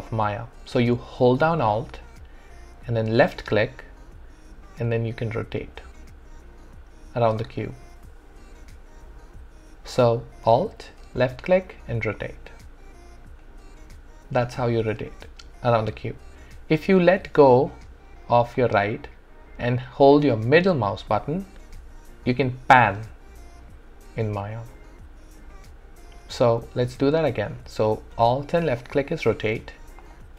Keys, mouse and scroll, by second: 3.2-11.2 alt+drag, 11.2-20.6 alt+drag, 20.6-28.6 alt+middle drag, 28.6-30.2 alt+drag.